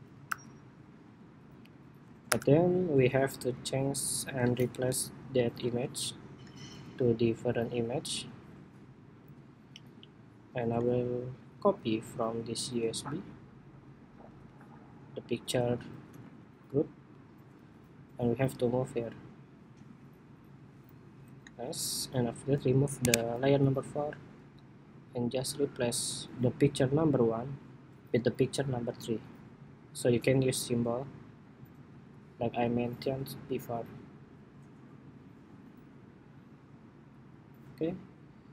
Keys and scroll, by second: 0.0 super+-, 0.8 super+-, 3.2 super+=, 5.4 super+c, 6.3 super+c, 14.0 super+c, 15.9 super+v, 28.0 super+c, 31.4 super+v.